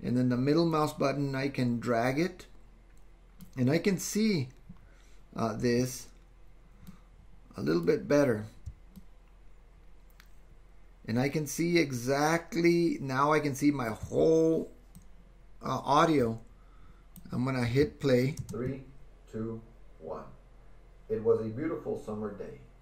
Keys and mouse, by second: 0.8-3.5 middle drag, 6.9-8.0 middle drag, 9.2-14.0 ctrl+drag, 15.1-18.7 drag, 18.5 space.